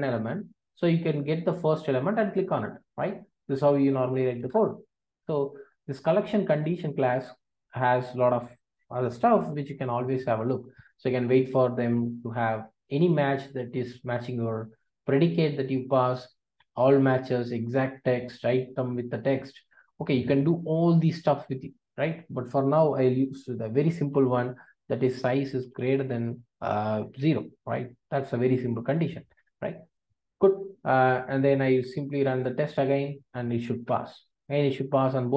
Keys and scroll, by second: 4.3 ctrl+alt+o, 9.5 ctrl+space, 25.8 Return, 32.2 ctrl+r.